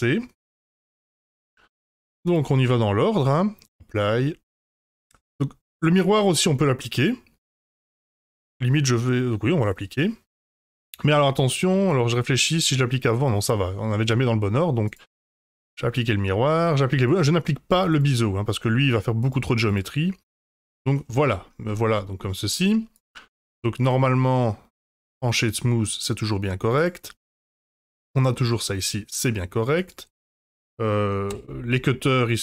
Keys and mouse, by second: 0.9 F5, 2.3-3.6 drag, 15.0-15.6 drag, 16.9-18.2 drag, 19.3-20.0 drag, 20.9-21.4 middle drag, 21.9 middle drag, 23.0-24.8 right drag, 25.3-25.7 middle drag, 26.8 click, 28.5-29.2 middle drag, 29.7 click, 30.6-31.0 middle drag, 31.3 h, 31.7 middle drag.